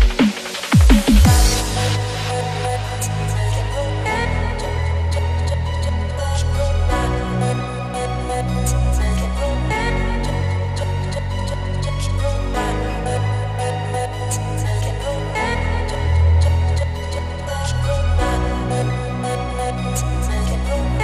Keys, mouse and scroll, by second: 4.4 space, 4.5 click, 4.6 space, 5.4-11.1 alt+drag, 11.9 ctrl+=, 12.2 space, 12.3-12.7 click, 12.5 space, 13.7 click, 15.5 click.